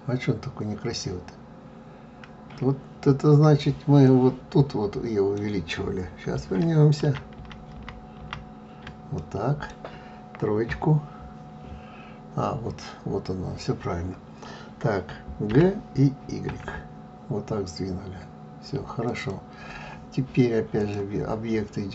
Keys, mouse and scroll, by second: 4.0-7.0 middle drag, 7.0 ctrl+z, 7.4 ctrl+z, 9.1-10.6 middle drag, 10.6 KP_3, 15.5 g, 20.8-21.9 drag.